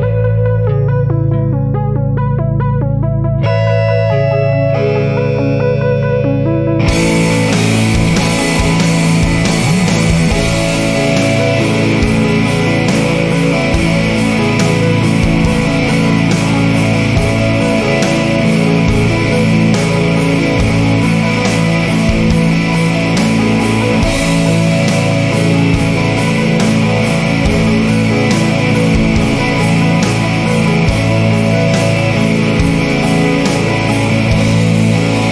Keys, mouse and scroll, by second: 0.2 scroll up 2, 2.0 click, 3.2 scroll up 1, 4.8 click, 6.1 scroll up 2, 8.4 click, 9.8-10.2 scroll up 2, 11.7 scroll down 2, 13.3 scroll down 2, 16.0 scroll up 2, 18.7 click, 19.6-19.9 scroll up 1, 21.4 click, 22.8 Escape, 23.5-24.4 scroll down 5, 24.8 scroll up 2, 26.3 click, 27.0 click, 28.9 click, 31.0 click, 32.7 click, 33.0 click, 34.2 click.